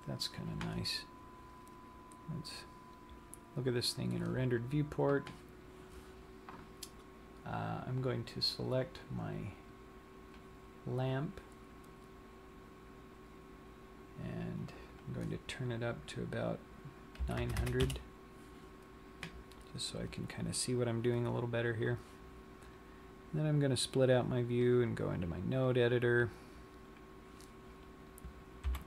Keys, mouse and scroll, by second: 2.6 click, 7.2-9.6 scroll down 1, 9.6 click, 11.1 click, 15.0 click, 17.7 KP_0, 23.9 click.